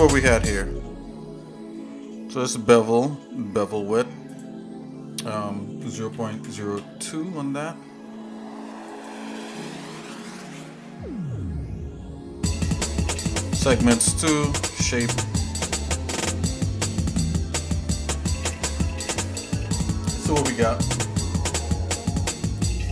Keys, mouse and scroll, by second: 4.8-9.0 drag, 18.2-19.4 shift+middle drag, 20.8 click.